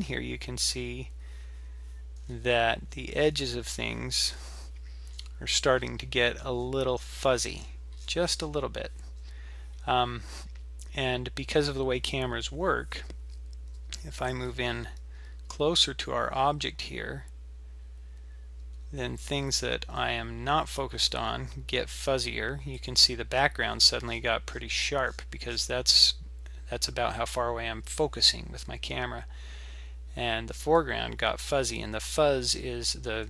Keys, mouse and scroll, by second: 0.7 scroll down 6, 2.2-2.5 scroll up 7, 3.2 scroll down 7, 4.3-4.6 scroll down 6, 5.2-6.6 scroll up 16, 6.6-7.5 scroll up 2, 7.5 scroll up 3, 7.6-9.2 scroll down 24, 9.2-9.8 scroll up 3, 9.8-10.3 scroll down 1, 10.3-12.8 scroll up 2, 23.6-24.6 scroll up 19, 25.0-26.5 scroll down 24, 26.7-27.8 scroll up 4.